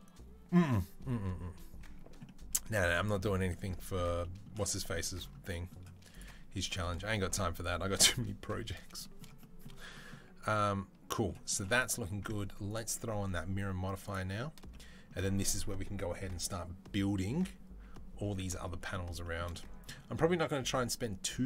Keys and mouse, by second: 6.0 click, 6.0-11.6 middle drag, 11.6 click, 11.6-12.6 middle drag, 12.6-21.4 drag.